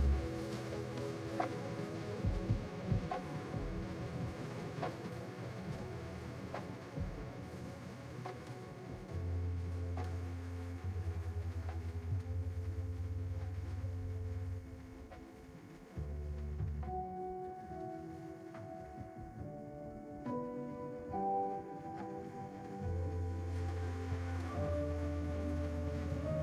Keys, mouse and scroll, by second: 15.0-15.6 scroll down 3, 16.0 click, 17.4-18.0 scroll down 2.